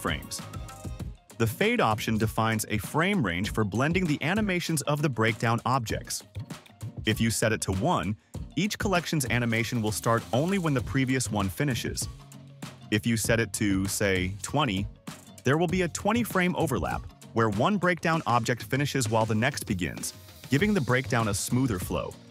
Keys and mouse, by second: 1.0 space, 11.3-12.4 drag.